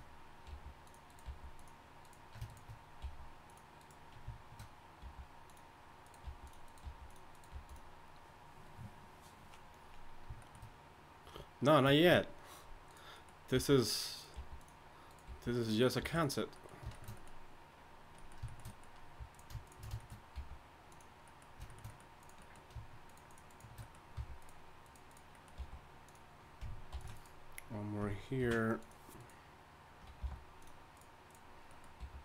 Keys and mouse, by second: 0.5 g, 1.2 g, 3.0 g, 5.0 g, 6.2 g, 6.8 g, 7.5 g, 12.9-16.1 right drag, 13.5 g, 14.3 g, 15.3 g, 16.0 g, 16.7 middle click, 17.2 click, 19.5-23.5 right drag, 20.3 g, 24.1 f, 24.4 right click, 25.6 g, 26.9 ctrl+r, 28.4 ctrl+r, 30.2 g, 31.7 click, 32.0 g.